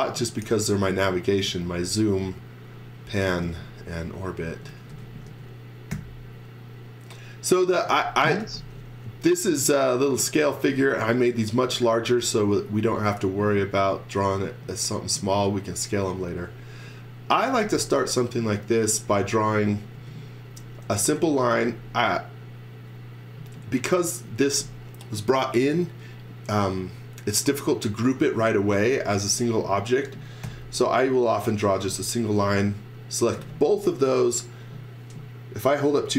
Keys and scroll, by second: 0.2 x, 0.5 v, 1.5 z, 2.2 x, 3.4 v, 4.4-5.9 typing, 7.7-8.9 typing, 10.2-12.2 typing, 16.1 space, 17.1-18.1 typing, 19.2 x, 19.9 space, 20.8 e, 21.4 space, 30.4 l, 31.9 space.